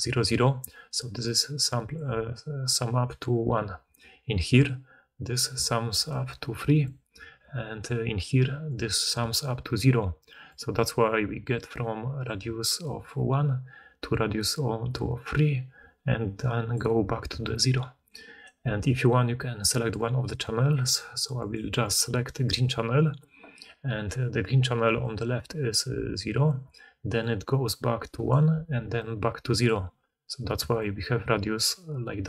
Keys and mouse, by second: 0.5 d, 3.8-9.1 typing, 10.4 d, 10.5 d, 12.3 d, 12.7 d, 13.4-15.7 drag, 13.4-15.7 middle drag, 13.4-15.7 right drag, 16.6-20.8 drag, 16.6-24.8 middle drag, 16.6-32.1 right drag, 16.6 d, 16.7 d, 17.2 d, 18.3 d, 21.3 click, 21.7 click, 24.8 d, 24.9-32.1 drag, 26.3-30.5 typing, 29.1 middle click, 32.2 d.